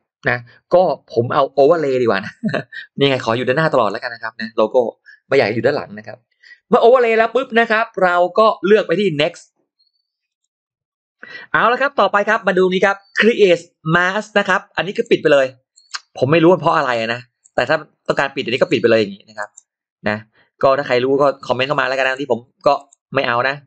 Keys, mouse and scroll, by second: 3.6 click, 10.1 click, 14.8 click, 15.6 click, 16.5 click, 17.3 click, 18.4 click, 19.2 click, 21.8 click, 22.6 click, 23.5 click.